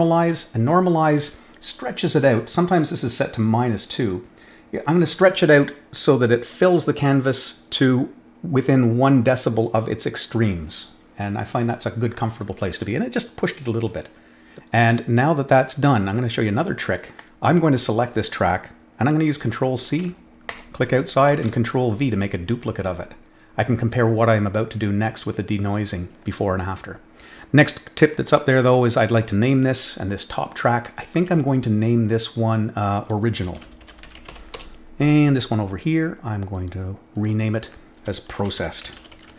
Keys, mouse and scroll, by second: 0.1 click, 11.7 click, 16.9 click, 17.1 click, 19.9 ctrl+c, 20.4 click, 21.2 ctrl+v, 28.2 click, 29.0 click, 33.9 i, 34.3 l, 36.5 click, 37.1 click, 38.4-39.3 typing.